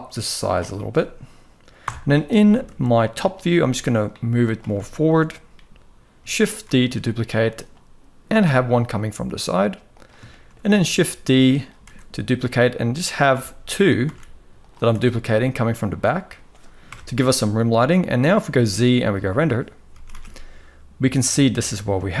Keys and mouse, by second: 1.5 KP_7, 2.3 r, 3.1 g, 4.5 shift+middle drag, 6.3 shift+d, 8.0 r, 10.0 shift+middle click, 10.5 shift+d, 11.5 r, 13.0 g, 13.7 shift+d, 14.6 r, 16.6 KP_0, 18.2 z, 19.7 ctrl+s, 19.8 ctrl+s, 21.8 shift+middle drag.